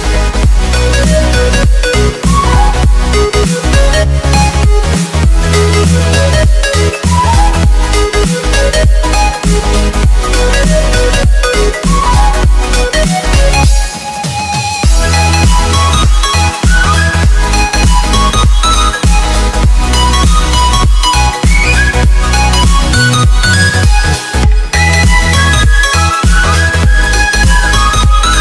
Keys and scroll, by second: 17.7 v, 18.2 ctrl+0, 23.1 ctrl+j.